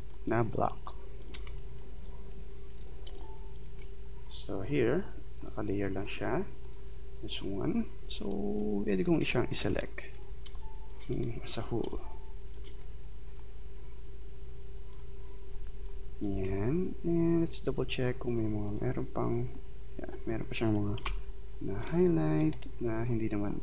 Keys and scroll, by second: 9.2 space, 15.7 space, 21.0 Delete.